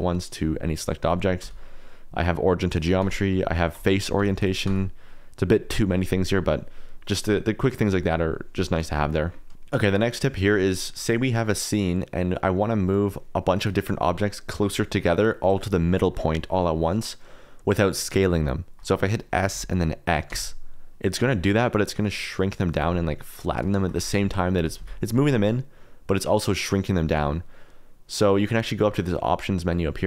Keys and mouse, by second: 0.2 middle click, 1.4 q, 3.0 q, 4.1 q, 4.6 q, 9.4 middle click, 11.4 middle click, 12.3 middle click, 13.0 middle click, 19.0 middle click, 19.5 s, 20.2 x, 23.0 click, 23.2 middle click, 23.7 shift+middle click, 24.2 ctrl+z, 24.5 s, 24.7 x, 27.0 Escape.